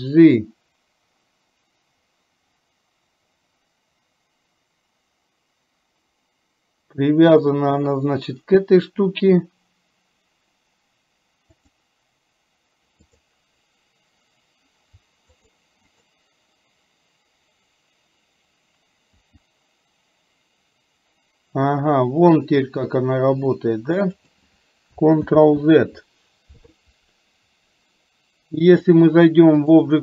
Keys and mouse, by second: 13.1 click, 15.0-15.9 r, 16.0 click, 19.3 r, 25.4 ctrl+z, 29.0 click.